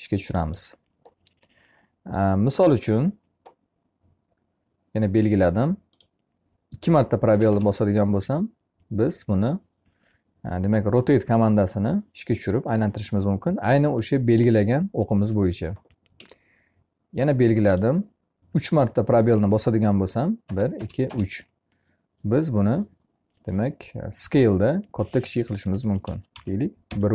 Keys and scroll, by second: 6.7 space, 15.5 Escape, 19.8 space, 25.2 1, 25.8 Delete, 26.2 2, 26.7 Return.